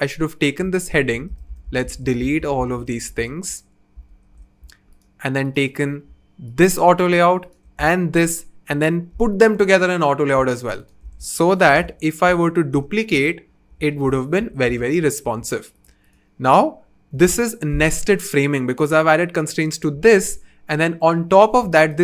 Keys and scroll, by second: 0.9 super+z, 1.1 typing, 4.1 super+z, 9.1 shift+a, 11.6 super+c, 12.3 super+v, 12.7 super+v, 13.1 super+v, 14.0 super+z, 14.4 super+z, 17.1 BackSpace.